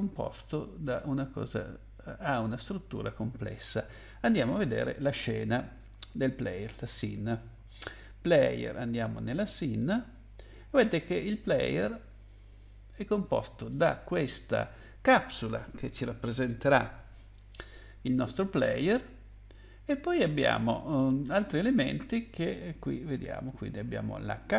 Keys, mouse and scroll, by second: 0.2 middle click, 9.8 click, 11.6 middle click, 18.4 middle click.